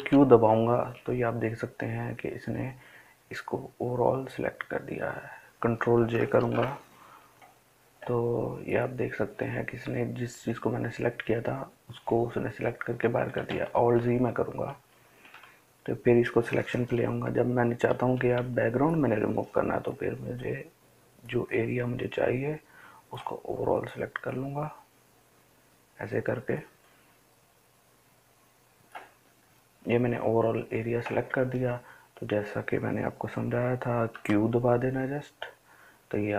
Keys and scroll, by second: 0.0 q, 6.4 ctrl+j, 17.0-17.7 ], 17.9 ], 18.2 ], 18.3 ], 34.1 q.